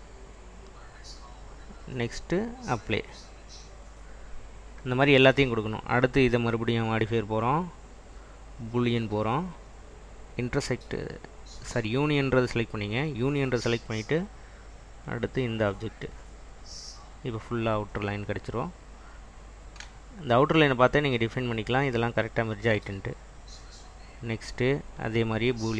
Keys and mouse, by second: 2.3-4.2 drag, 6.6-9.6 drag, 10.5 click, 15.1-16.5 drag, 19.0-20.8 drag, 23.9-25.7 drag.